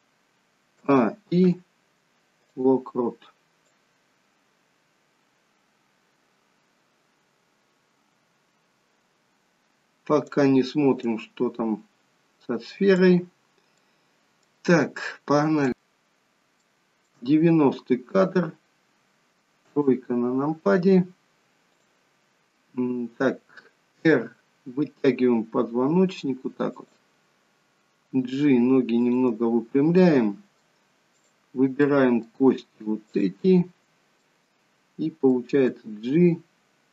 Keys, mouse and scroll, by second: 0.8 a, 1.4 i, 3.8 click, 11.2 click, 13.5 scroll down 3, 13.8 middle click, 16.8 shift+middle click, 16.8-17.8 shift+scroll up 1, 18.8-19.6 scroll up 1, 19.6 scroll up 1, 19.7 KP_3, 21.8 click, 24.1 r, 28.3 g, 30.0 middle click, 31.2 click, 31.9 middle click, 33.2 shift+click, 34.3 middle click, 35.8 g.